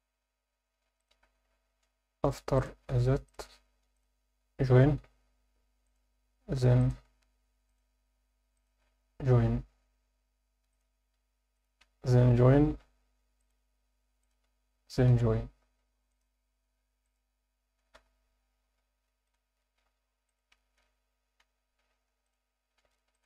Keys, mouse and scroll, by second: 1.0 shift+click, 1.0-2.5 shift+scroll up 2, 2.5 click, 3.9 shift+click, 5.0 j, 5.8 click, 6.8 shift+click, 7.7 click, 8.5 shift+click, 10.0 j, 10.7 click, 11.5 shift+click, 12.5 j, 13.4 click, 14.2 shift+click, 15.1 j, 16.1 click, 17.0 shift+click, 17.9 j, 19.2 click, 20.3 shift+click, 21.4 j, 22.3 click, 23.1 shift+click.